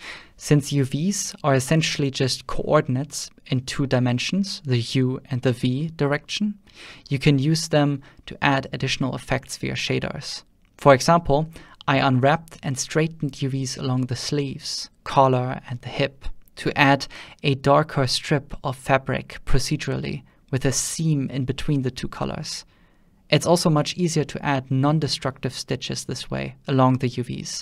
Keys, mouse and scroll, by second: 0.0-1.1 shift+drag, 1.1 ctrl+middle click, 1.3 ctrl+middle click, 1.3 shift+middle click, 1.5 shift+middle click, 1.7 shift+click, 2.6 shift+click, 3.1 ctrl+shift+middle click, 3.9 ctrl+middle click, 4.0 ctrl+Tab, 4.7 right click, 4.8 Tab, 5.1 a, 5.2 ctrl+middle click, 5.7 ctrl+middle click, 5.9 alt+a, 6.0 ctrl+click, 6.1 ctrl+middle click, 6.2 g, 6.4 click, 6.6 middle click, 6.9 click, 7.1 middle click, 7.2 click, 7.6 ctrl+middle click, 8.1 click, 8.8 alt+a, 9.0 middle click, 9.1 Tab, 9.2 ctrl+middle click, 9.5 shift+click, 10.4 ctrl+middle click, 10.8 click, 11.7 middle click, 12.2 ctrl+middle click, 12.7 ctrl+middle click, 12.8 ctrl+middle click, 12.9 middle click, 13.0-13.5 drag, 13.8 ctrl+space, 13.9 ctrl+middle click, 14.2 /, 14.5 `, 14.6 ctrl+space, 14.8 ctrl+middle click, 14.9 middle click, 15.1 alt+`, 15.1 middle click, 15.2 ctrl+middle click, 15.4 middle click, 15.4 ctrl+space, 16.1 ctrl+s, 16.1 ctrl+middle click, 16.4 shift+middle click, 16.8 middle click, 16.8 shift+z, 16.9 ctrl+middle click, 18.3 middle click, 18.8 ctrl+shift+click, 19.4 ctrl+shift+click, 19.5 ctrl+middle click, 20.1 ctrl+s, 20.8 ctrl+middle click, 21.2 `, 22.7 middle click, 23.0 alt+a, 24.2 ctrl+shift+click, 24.5-25.0 middle drag, 25.3 middle click.